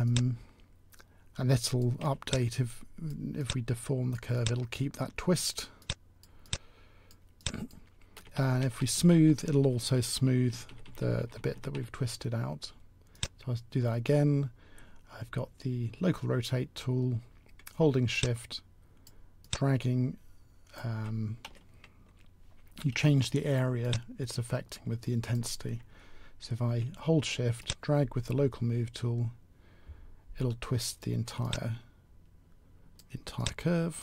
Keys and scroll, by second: 8.2 s, 8.3 s.